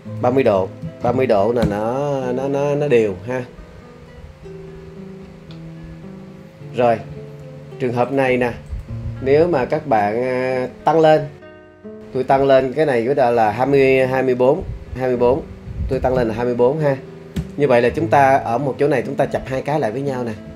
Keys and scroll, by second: 0.6-1.6 typing, 1.6 Return, 15.7-16.6 typing, 17.4 Return.